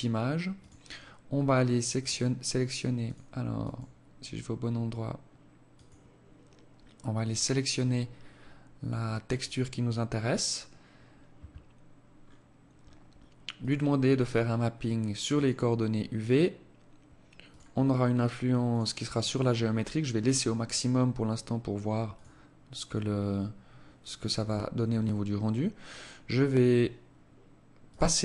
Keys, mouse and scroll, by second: 8.6 click, 11.3-12.7 scroll down 5, 12.7 click, 12.7-13.3 scroll down 2, 13.3 click, 15.3 click, 16.7 click, 16.9-17.9 scroll down 3, 17.9 click, 19.9 scroll up 5, 20.1 scroll down 1, 20.2-21.3 scroll up 3, 21.3 click, 21.3 scroll up 1, 27.0 click.